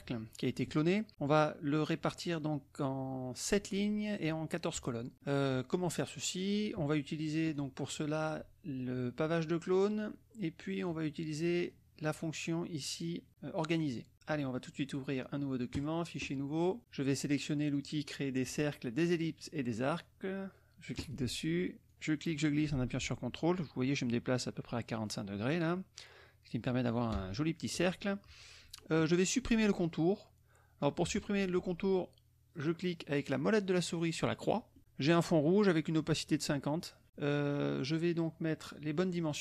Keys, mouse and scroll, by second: 7.4 click, 10.8 click, 11.6 click, 14.1 click, 15.7 click, 20.9 click, 21.9-27.9 drag, 34.7 middle click.